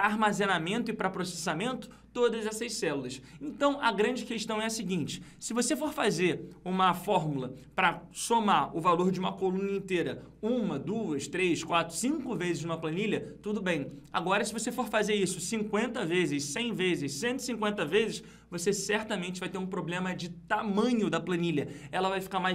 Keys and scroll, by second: 7.2 F2.